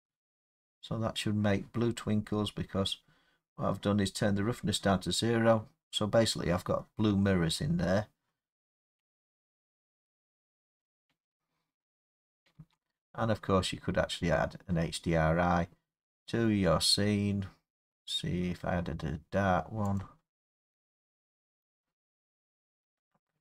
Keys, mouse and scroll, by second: 2.2 middle click, 2.3 middle click, 3.9-7.4 middle drag, 12.5 space, 20.3-21.6 drag, 23.2 click.